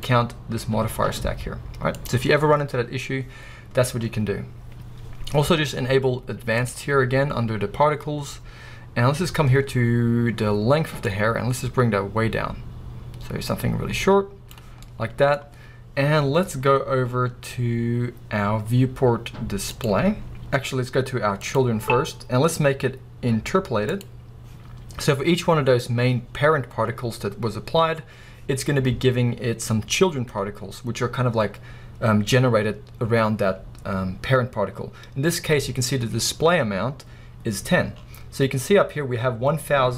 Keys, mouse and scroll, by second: 1.4-2.3 scroll up 1, 2.3-3.1 scroll up 1, 3.1-3.9 scroll up 1, 3.9-4.7 scroll up 1, 4.7-5.6 scroll up 1, 5.6-6.4 scroll up 1, 6.6 drag, 11.1-15.0 drag, 15.0-23.9 middle drag, 23.9 click, 25.2 scroll up 2.